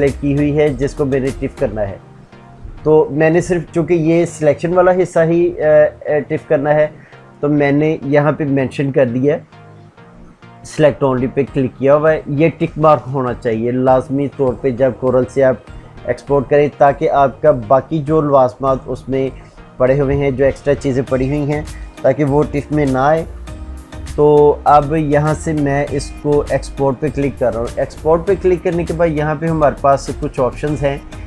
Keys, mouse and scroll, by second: 5.5 click, 6.4-7.2 typing, 8.9-9.6 typing.